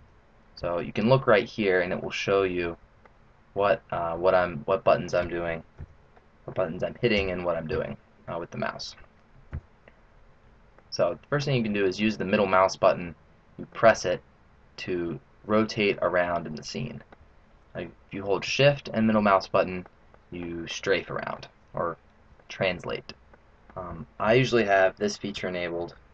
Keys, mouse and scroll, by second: 1.9 middle click, 3.0 scroll down 5, 3.5-4.2 scroll up 5, 4.2 middle click, 5.7 KP_7, 7.1 KP_1, 7.6 KP_3, 9.4 KP_7, 10.6 middle click, 12.2-12.8 scroll down 2, 13.6 middle click, 19.3 shift+middle click, 20.0 shift+middle click, 20.6 shift+middle click, 20.9 shift+middle click, 21.7 scroll up 4, 22.3 shift+middle click, 23.2 shift+middle click.